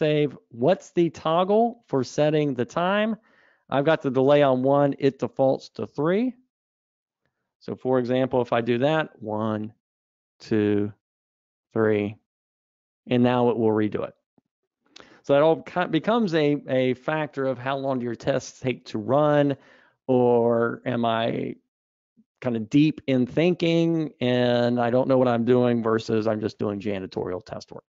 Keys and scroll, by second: 16.2 super+z.